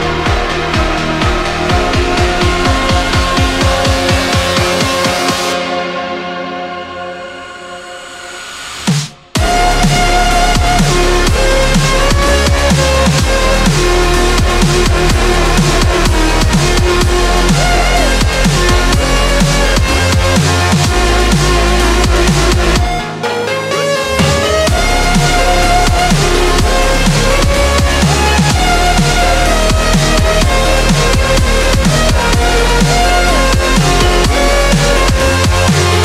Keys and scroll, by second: 0.3 ctrl+z, 0.5-3.4 scroll down 1, 3.4 ctrl+z, 5.0 ctrl+z, 6.1 scroll down 1, 6.3 ctrl+z, 7.7 ctrl+z, 7.9 scroll up 1, 8.2 x, 8.9-9.5 scroll up 1, 9.5-9.8 scroll down 2, 9.7 ctrl+z, 15.3-15.9 scroll down 2, 15.9-16.5 scroll up 1, 19.7 scroll down 1, 19.9-20.3 scroll up 1, 20.5 scroll up 1, 20.5 scroll down 1, 22.9 ctrl+z, 23.3-23.7 scroll up 1, 25.6 p, 27.0 ctrl+z, 27.8-28.2 scroll down 1, 35.1 ctrl+z.